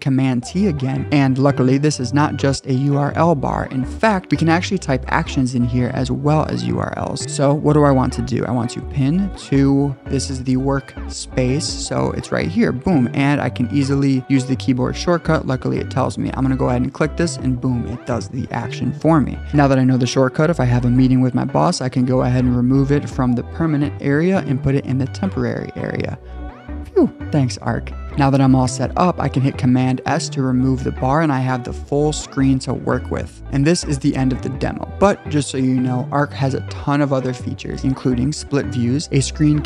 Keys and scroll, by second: 21.5 super+d, 23.4 super+d, 28.1 super+s, 29.8 super+s.